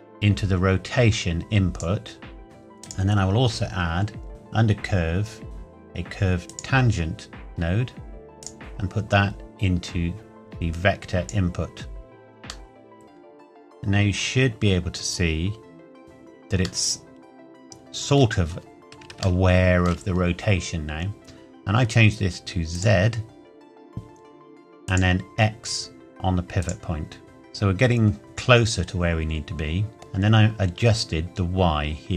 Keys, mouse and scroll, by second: 2.8 click, 6.4 click, 12.6 middle click, 18.2 scroll up 1, 19.4 shift+middle click, 22.7 click, 27.2 middle click, 31.0 click.